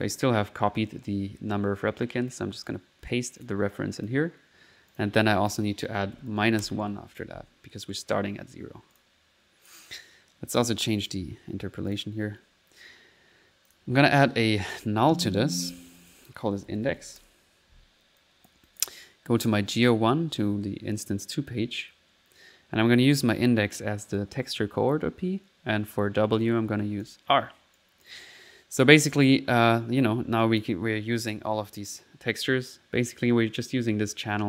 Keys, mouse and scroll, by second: 2.6 right click, 3.4 click, 4.0 click, 4.9 click, 9.0 click, 9.5 middle click, 10.6 click, 11.1 click, 11.9 click, 12.5 middle click, 13.7 click, 15.0 alt+n, 15.6 alt+click, 15.9 alt+click, 16.3 click, 18.2 click, 19.5 click, 21.1 click, 23.2-24.3 drag, 26.4 click, 27.1 click, 27.8 click, 29.8 typing, 30.0 middle click, 30.5 click, 32.6 middle click, 32.6 typing, 33.1 click.